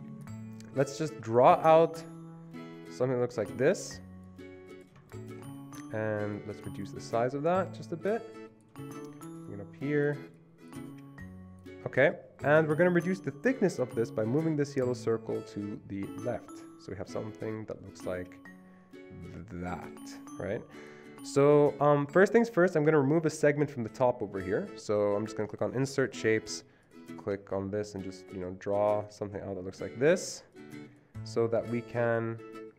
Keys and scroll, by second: 12.3 ctrl+z.